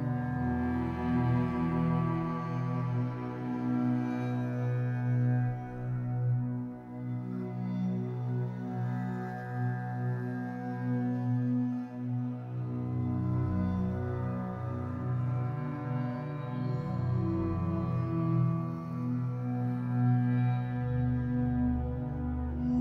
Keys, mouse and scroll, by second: 0.3 click, 0.9 click, 1.5-3.2 drag, 3.2-3.5 scroll up 1, 3.5 shift+middle drag, 3.7 scroll up 3, 4.7 click, 4.9 click, 5.8 ctrl+z, 6.5-9.5 drag, 10.4-13.4 drag, 14.6-17.7 drag, 17.9 scroll down 4, 18.1-19.0 middle drag, 19.0 ctrl+a, 19.7-20.1 middle drag, 20.1 scroll down 3, 20.3 b, 20.7 o.